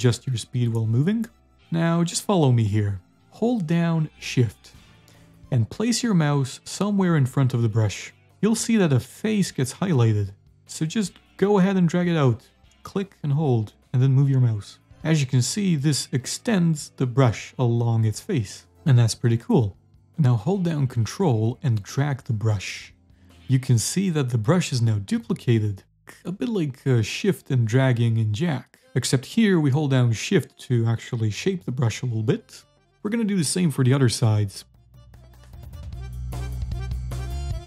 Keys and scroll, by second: 0.0-1.5 typing, 2.8 s, 4.0 w, 17.2 d, 17.8 s, 19.7-21.9 typing, 27.7 a, 28.8-29.6 typing, 31.0-32.0 typing, 35.2 s.